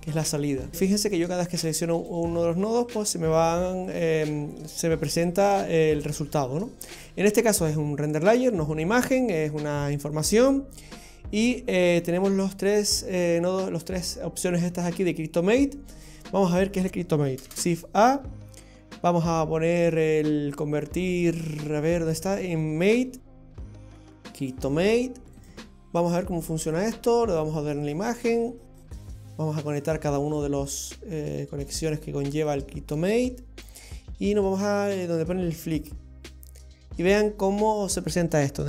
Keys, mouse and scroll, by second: 1.0 click, 1.9 click, 2.8 click, 3.8 click, 6.9 click, 15.6 click, 17.4 shift+a, 26.7 click, 28.8 click, 30.6 click, 32.4 click, 35.0 click.